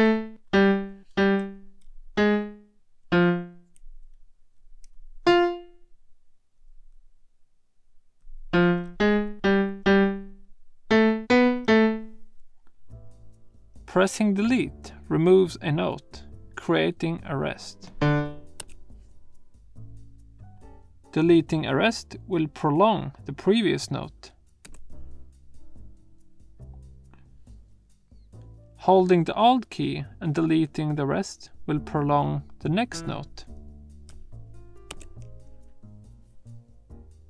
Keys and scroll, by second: 0.4 Down, 1.1 Right, 2.2 alt+Up, 3.0 Right, 5.2 super+Up, 8.5 super+Down, 8.9 Left, 9.3 alt+Down, 9.9 Left, 10.9 Up, 11.3 Left, 11.6 Down, 18.6 BackSpace, 24.7 BackSpace, 32.8 Left, 34.9 alt+BackSpace.